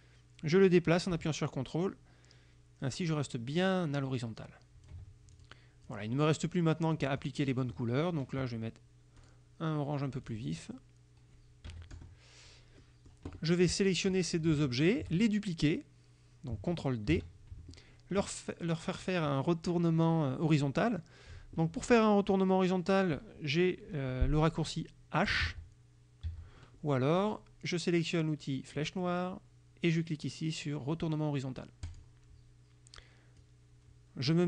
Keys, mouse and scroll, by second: 5.4 ctrl+click, 6.0 ctrl+click, 7.3 click, 9.3 click, 10.4 click, 11.8 KP_Subtract, 12.0 KP_Add, 12.9 click, 14.2 click, 14.8 shift+click, 17.2 ctrl+d, 25.5 h, 26.4 h, 28.9 click, 32.0 click, 33.5 click.